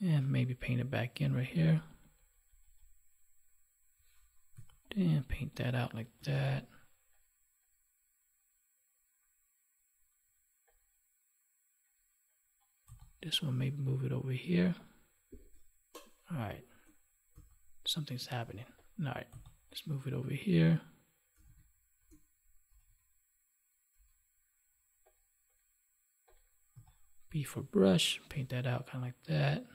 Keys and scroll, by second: 6.3 ctrl+s, 17.3 ctrl+z.